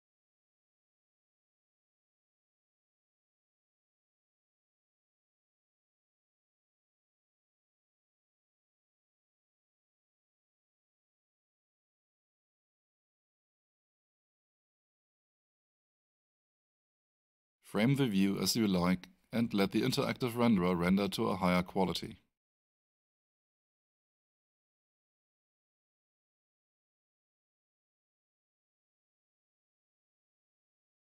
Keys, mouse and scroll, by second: 0.3 0, 1.2 Return, 18.5 alt+click, 24.7 alt+click, 25.7 alt+right click, 26.6 alt+right click, 26.7 alt+middle click, 28.0 alt+right click, 28.8 alt+middle click, 31.0 alt+middle click.